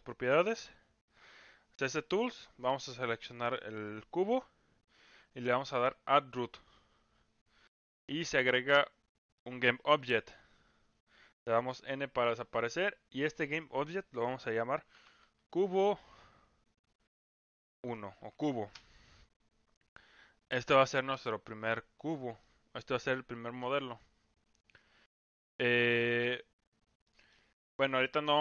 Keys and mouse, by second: 1.2 click, 2.8 click, 6.5 click, 8.4-10.0 middle drag, 11.4 n, 13.1-18.8 drag, 21.2-21.6 middle drag, 22.4-23.6 middle drag, 24.8-25.1 middle drag, 26.0-26.4 middle drag, 27.0 middle drag.